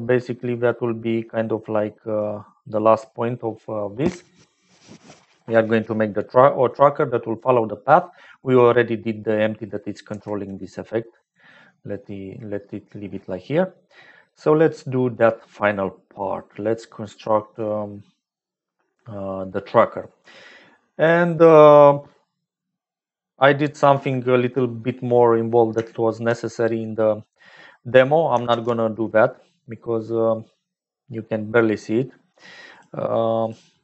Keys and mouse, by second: 6.3 click, 7.8 click, 10.0 g, 13.3 middle click, 22.8 middle click, 24.5 middle click, 26.5 click, 28.4 shift+a.